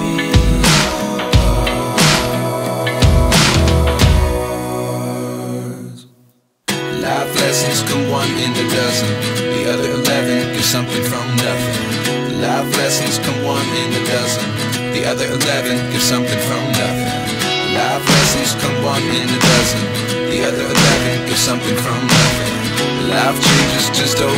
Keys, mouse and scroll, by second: 0.0-1.6 drag, 3.1-5.1 drag, 5.3-11.1 drag, 11.1 ctrl+s, 11.5 click, 12.4-13.8 drag, 13.8-14.9 scroll down 4, 14.9-18.8 drag, 18.9 shift+d, 20.4 ctrl+s, 20.6 click, 21.8-23.6 drag, 23.8 ctrl+s, 23.9 click, 24.1 middle click, 24.3 scroll up 5.